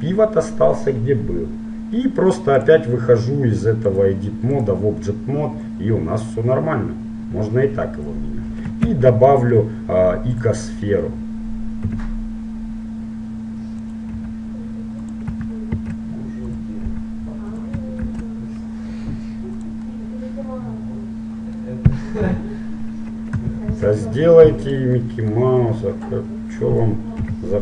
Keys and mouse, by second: 3.3 click, 4.7-5.8 drag, 6.0-7.8 drag, 8.9 shift+a, 12.1 g, 14.4 s, 16.0 shift+d, 17.0 s, 18.2 shift+d, 22.3 KP_7, 23.9 shift+d, 25.1 middle click, 26.2 middle click, 26.9-27.6 drag, 27.5 KP_7.